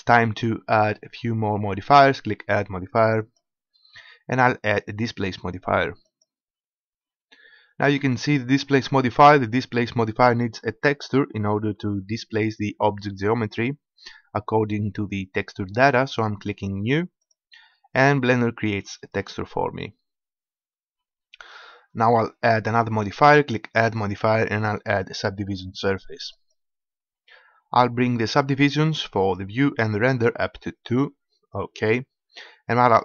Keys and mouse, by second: 3.3-6.3 drag, 17.4-19.2 drag, 23.9-26.6 drag, 30.9-32.8 drag.